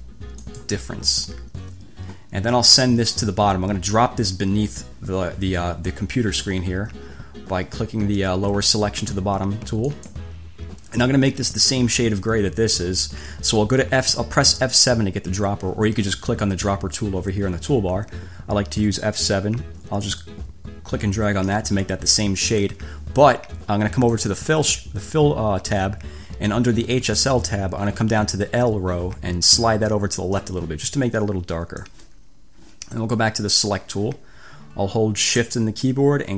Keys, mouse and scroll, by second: 0.7 click, 10.0 click, 14.3 F7, 20.3-21.9 drag, 24.3 click, 27.2 click, 30.5 click, 33.7 click.